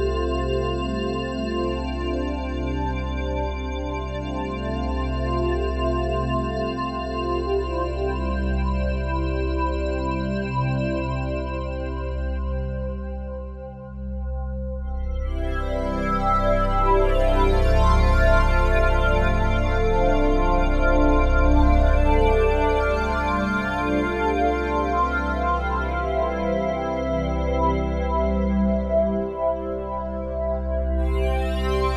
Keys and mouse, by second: 0.0-12.8 typing, 14.7-21.4 typing, 23.2-23.6 typing, 25.5 click, 25.5 typing, 28.2 click, 29.3 click.